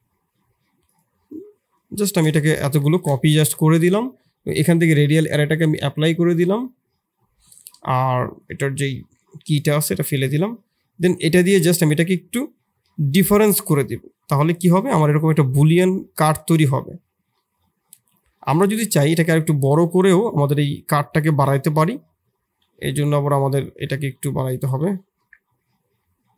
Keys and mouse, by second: 2.0 shift+z, 2.4-2.7 middle drag, 3.0 shift+z, 3.1-3.8 middle drag, 5.2 click, 6.6 middle click, 8.6 Delete, 9.1 middle click, 9.7 middle click, 11.3 shift+click, 11.8 q, 13.7-14.9 middle drag, 16.3 KP_1, 17.3-17.6 middle drag, 18.7 s.